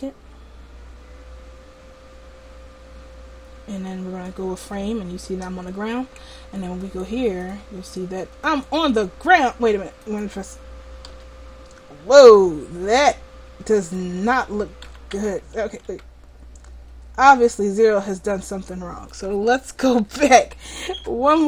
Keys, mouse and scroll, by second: 4.3-5.3 drag, 5.3 right click, 5.9 middle click, 6.9 right click, 7.4-10.5 drag, 11.1 r, 14.9 a, 15.3 a, 15.7 alt+r, 17.6-19.4 drag.